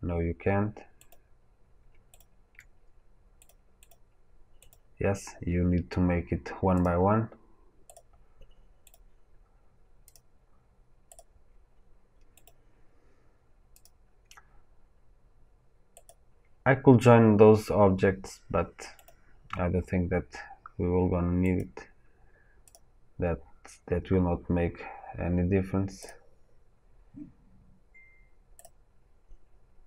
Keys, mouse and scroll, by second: 2.1 shift+click, 3.4 click, 6.8-11.1 drag, 13.8-16.0 drag, 22.7-28.5 drag.